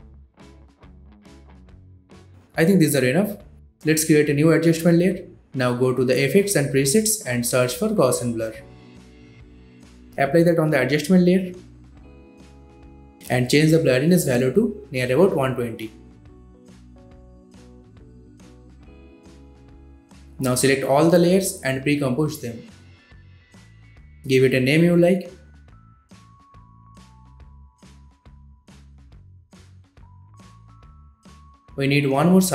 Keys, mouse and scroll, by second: 0.1 click, 0.3 ctrl+d, 0.4 click, 0.5 ctrl+d, 0.5 click, 0.7 s, 0.7 click, 0.8 ctrl+d, 0.8 click, 1.1 space, 1.3 click, 1.3 ctrl+d, 1.3 click, 1.4 click, 1.5 ctrl+d, 1.5 click, 1.6 click, 1.6 space, 1.7 scroll down 1, 1.7-2.3 drag, 2.8 right click, 3.5 click, 7.3 scroll down 1, 7.6-8.2 scroll up 1, 8.2 click, 8.6 click, 8.9-9.9 typing, 11.1-17.6 drag, 22.0 right click, 23.7 click, 24.5-27.4 typing, 28.3 Return, 29.6-32.5 drag.